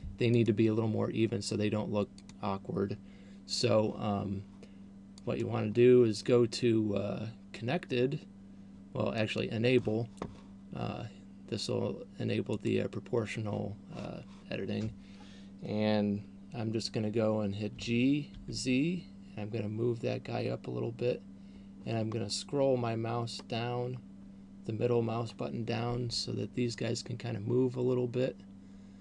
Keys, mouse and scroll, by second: 0.6 click, 2.3 click, 5.6 click, 12.8 click, 18.1 g.